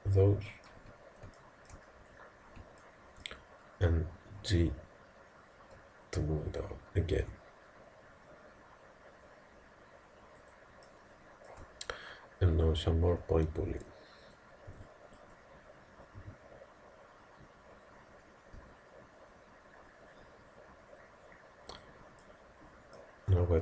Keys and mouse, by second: 1.4-4.5 middle drag, 4.6 g, 10.9-14.7 middle drag, 12.6 a, 13.7 b, 14.7 b, 16.2 g, 22.2 middle click.